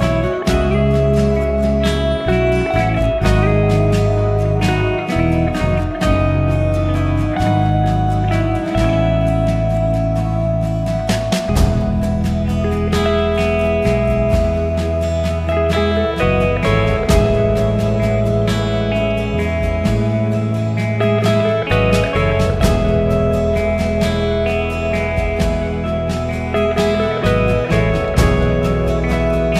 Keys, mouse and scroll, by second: 3.8-25.3 drag, 26.4-29.5 drag.